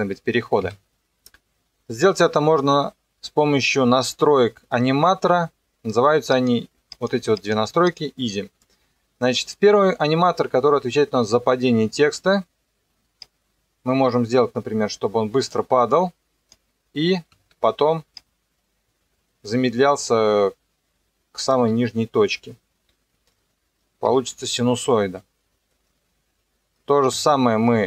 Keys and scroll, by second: 0.6 Escape, 17.5 ctrl+2, 24.1 Escape.